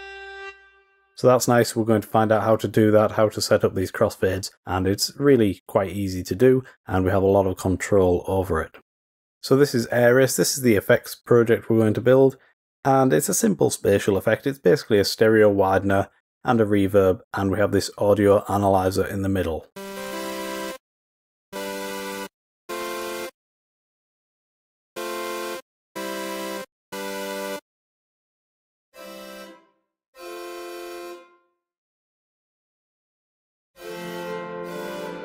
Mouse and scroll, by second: 23.9 click, 28.3 click, 31.8-32.7 drag.